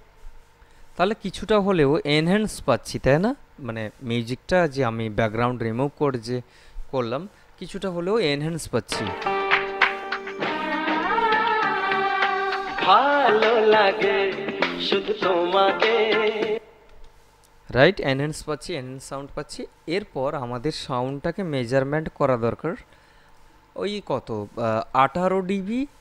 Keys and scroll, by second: 9.1 space, 16.7 space.